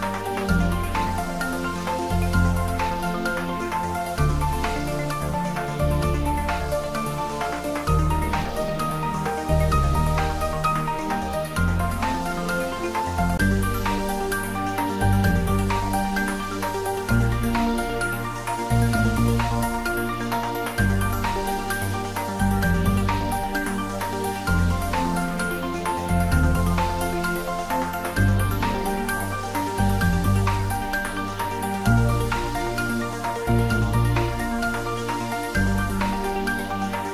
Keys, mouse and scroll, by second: 7.1-9.0 scroll up 1, 9.8-11.0 scroll up 1, 15.3 scroll up 1, 15.4-16.2 scroll down 1, 16.8-21.8 middle drag, 23.0 scroll up 1, 26.4-28.1 scroll up 1.